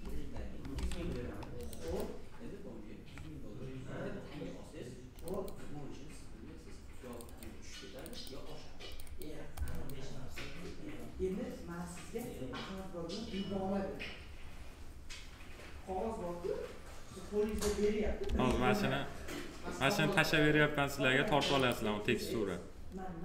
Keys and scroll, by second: 0.0 Delete, 18.2 ctrl+c.